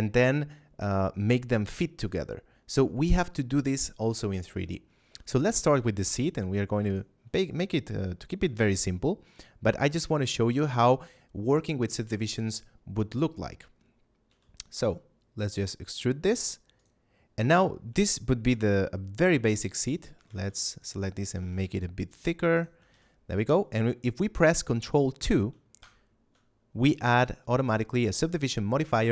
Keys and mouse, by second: 5.5 shift+a, 6.7 click, 8.3 Tab, 9.7 middle click, 14.2 e, 16.7 click, 17.3 a, 17.9 shift+middle click, 19.7 right click, 20.1 ctrl+Tab, 20.7 click, 20.9 right click, 21.3 g, 21.3 z, 22.5 shift+click, 22.8 a, 25.7 ctrl+2.